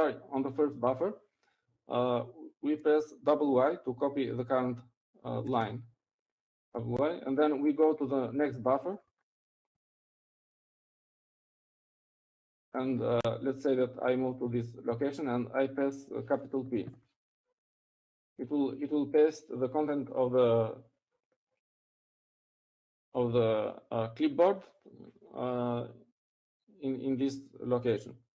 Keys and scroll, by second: 0.2 Up, 8.2-8.7 typing, 11.7 typing, 12.8-13.2 typing, 15.1-16.3 typing, 17.2 Down, 20.3-22.0 typing.